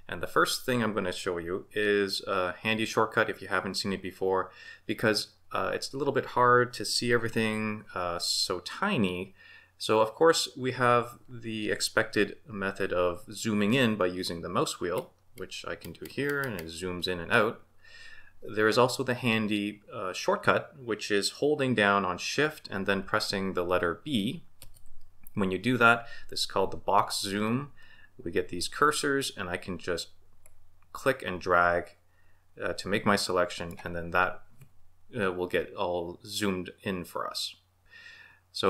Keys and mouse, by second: 24.6 shift+b.